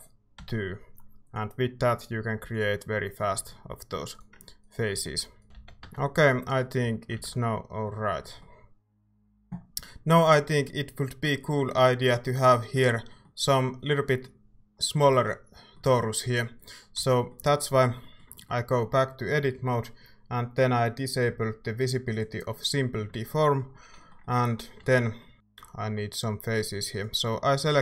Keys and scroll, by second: 0.0-0.3 typing, 4.7-6.8 typing, 7.2 ctrl+s, 8.0-8.7 typing, 16.9 Tab, 17.9 a.